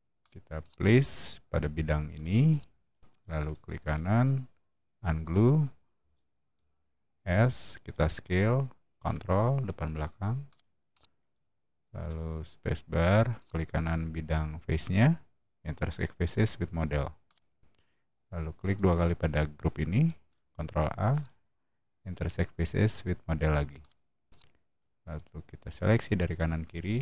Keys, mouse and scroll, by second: 0.1 click, 0.5 middle click, 2.0 click, 2.0 right click, 2.4 middle click, 3.7 right click, 5.1 click, 5.8 space, 6.4 s, 7.7 click, 10.3 ctrl+click, 10.8 ctrl+middle drag, 11.8 space, 13.2 right click, 17.1 click, 18.5 click, 18.8 click, 20.1 ctrl+a, 21.0 right click, 23.7 click, 24.2 middle click, 24.9-26.1 drag.